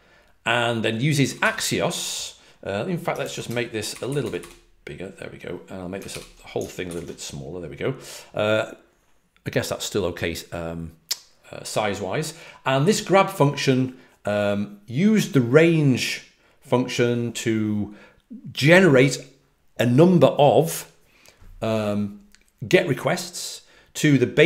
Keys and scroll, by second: 1.2 typing, 4.0-4.3 typing, 6.0 super+-, 6.8 alt+super+f.